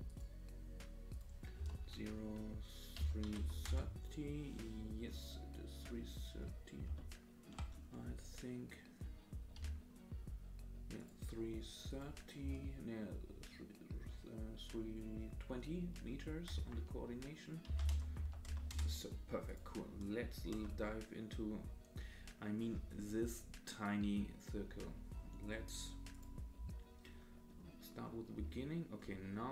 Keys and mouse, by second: 1.1-4.7 drag, 7.0-7.5 shift+drag, 9.6 g, 12.0-19.2 drag, 19.5 click, 20.5 KP_0, 26.1 click, 28.4 space.